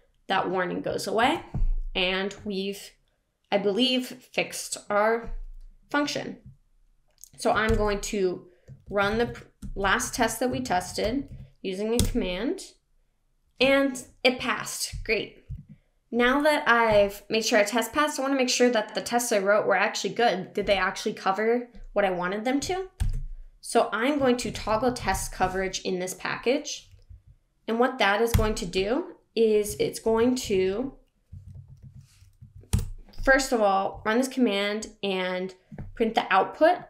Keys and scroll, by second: 1.1 super+s, 7.6 shift+super+p, 22.9 shift+super+p, 30.0 shift+super+p.